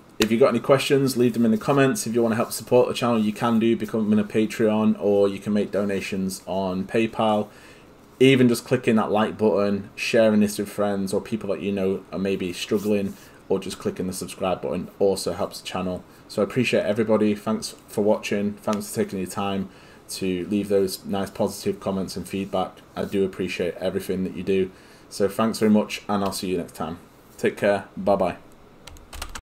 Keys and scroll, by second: 29.2 alt+F9.